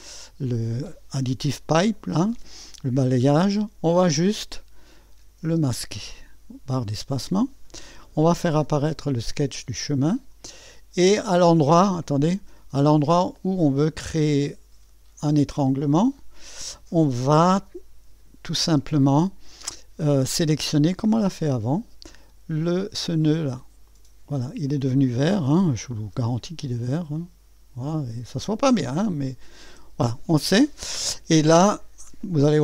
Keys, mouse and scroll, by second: 0.0 click, 5.4 space, 6.9 space, 8.3-10.2 drag, 8.6 typing, 12.0-13.2 drag, 12.4 space, 15.4-17.5 drag, 17.5 space, 18.8 space, 20.9-21.4 scroll up 1, 21.2-23.9 right drag, 23.9 click, 26.2 typing, 26.4 scroll up 1, 28.7-29.4 typing, 28.7 scroll down 3.